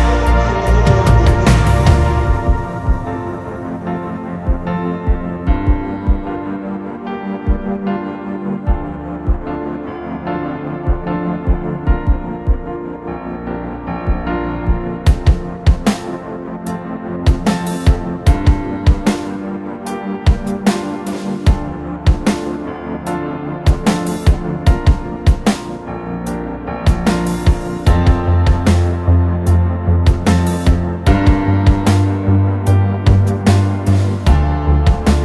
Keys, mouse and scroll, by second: 0.0-1.2 typing, 3.4 middle click, 3.7 scroll down 1, 4.9-5.9 typing, 5.2 click, 6.7 click, 7.4 l, 8.4 space, 11.1 middle click, 11.1 scroll down 2, 12.2 l, 13.1-14.4 middle drag, 13.1-14.2 scroll up 2, 13.4-17.3 typing, 14.2 scroll up 1, 14.9 Return, 15.3 middle click, 15.3-15.6 scroll down 1, 17.8 drag, 18.4-24.2 typing, 18.7-19.2 scroll down 1, 21.4 scroll down 2, 24.4-25.1 scroll down 1, 25.8 scroll down 1, 25.9 space, 26.9 scroll up 2, 27.0 scroll down 2, 27.2 middle click, 27.7-28.6 scroll down 2, 28.6 scroll down 1, 28.7 i, 29.7-30.1 scroll down 2, 30.1-30.9 drag, 30.1 space, 31.0 f, 32.0-33.4 typing, 32.3 middle click, 32.6-33.2 scroll down 1, 34.5 middle click, 34.5 scroll down 1.